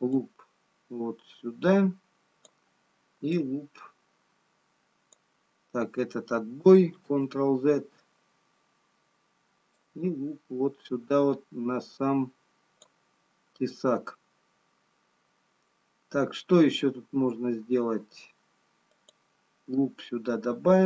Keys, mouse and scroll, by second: 0.6 click, 3.5 click, 8.6 ctrl+z, 10.2 click, 19.0 click.